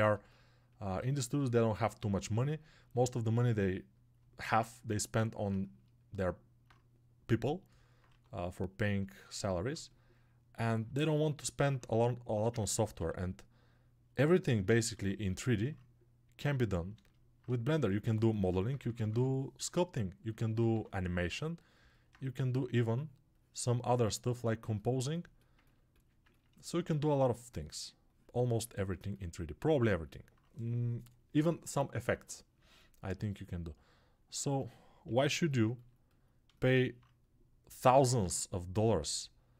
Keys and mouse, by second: 0.6-19.6 ctrl+alt+drag, 4.3 alt+q, 8.0 1, 12.5 ctrl+z, 12.9 g, 15.0 alt+q, 17.8 1, 18.4 [, 19.6-25.2 ctrl+right drag, 20.6 2, 32.5-39.1 alt+shift+drag, 35.0 g, 38.0 alt+q, 39.1-39.5 alt+middle drag.